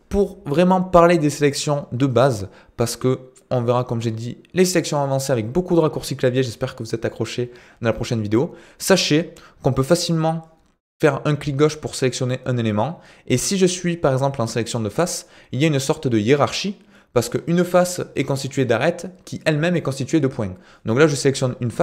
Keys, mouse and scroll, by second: 2.1-3.1 middle drag, 9.8 click, 11.0 click.